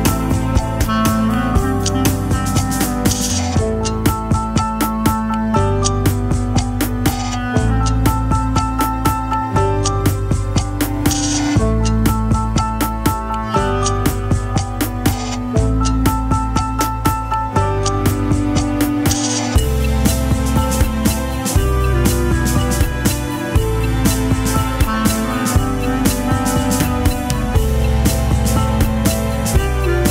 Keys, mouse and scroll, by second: 0.9 s, 7.2 s, 12.1 s, 13.8 alt+click, 14.9 alt+click, 17.7 middle click, 22.4 s, 26.8 middle click.